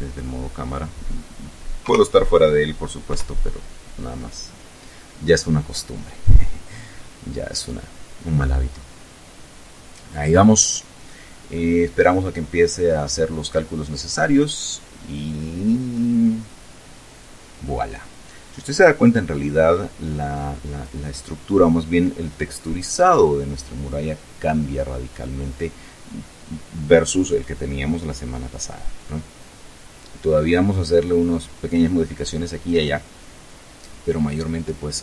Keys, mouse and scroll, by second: 1.8 KP_0, 3.1 F12.